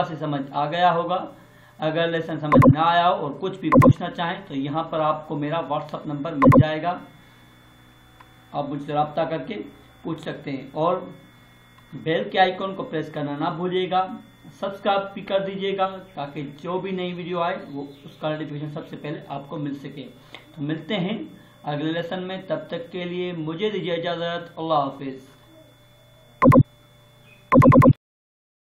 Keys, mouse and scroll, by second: 2.5 click, 6.4 click, 26.4 click.